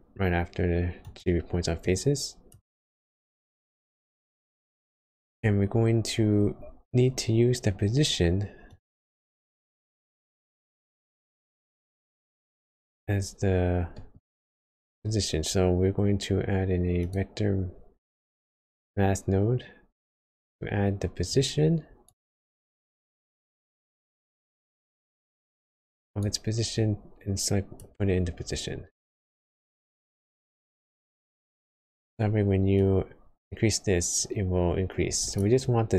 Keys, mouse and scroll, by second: 1.8 click, 2.9-3.3 scroll down 2, 3.4 middle click, 4.0-4.5 scroll up 1, 5.3 click, 13.4 scroll down 2, 13.9 middle click, 14.2-14.6 scroll up 4, 14.7 shift+a, 21.3-28.7 click, 28.7 scroll down 2, 29.2 middle click, 29.5-30.1 scroll up 3, 31.6 middle click, 32.8 click, 35.3-35.6 scroll up 4.